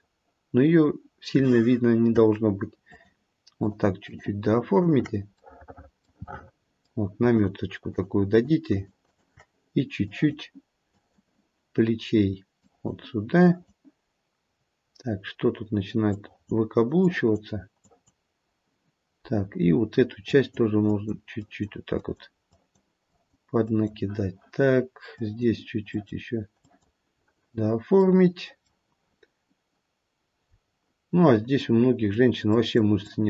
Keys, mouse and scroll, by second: 2.8 shift+click, 3.6 shift+click, 4.0 shift+click, 4.7 shift+click, 5.7 middle click, 6.2 middle click, 7.3 shift+click, 8.0 shift+click, 8.3 shift+click, 8.6 shift+click, 9.0 shift+click, 10.0 click, 10.9 click, 12.6 click, 15.0 click, 15.1-16.1 scroll down 1, 16.1 click, 17.0 click, 18.1 click, 19.2-20.3 scroll up 1, 20.3 click, 20.3-20.8 scroll up 1, 20.8 click, 21.3 click, 22.0 click, 23.0 click, 23.6 click, 25.2 click, 25.9 click, 26.6 click, 28.4 middle click, 30.5-31.4 scroll down 2, 31.6 click, 32.5 click, 33.0 click.